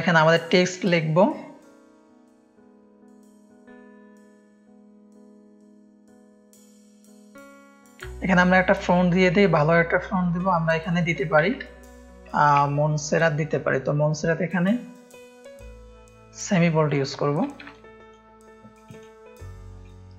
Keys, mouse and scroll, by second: 0.0-2.2 drag, 2.4-5.2 typing, 6.0 click, 11.4 m, 11.7 o, 12.3 n, 12.7 t, 16.8-18.1 drag, 17.7 ctrl+space, 18.7 click, 19.8 click.